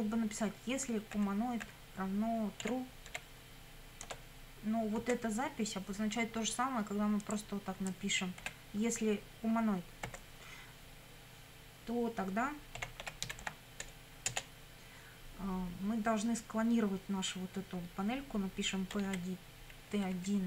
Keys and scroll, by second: 1.1 =, 2.6 t, 3.1 r, 4.0 Tab, 5.1 space, 8.4 BackSpace, 10.1 space, 12.6-13.9 typing, 14.3 Return, 18.7-19.9 typing.